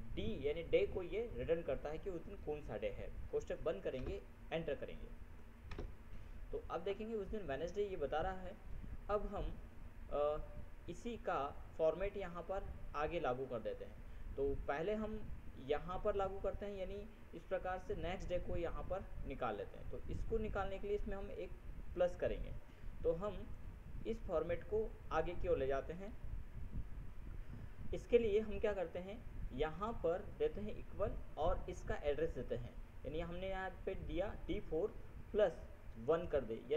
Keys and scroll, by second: 3.4 ctrl+shift+0, 6.0 ctrl+Return, 27.3 ctrl+F7.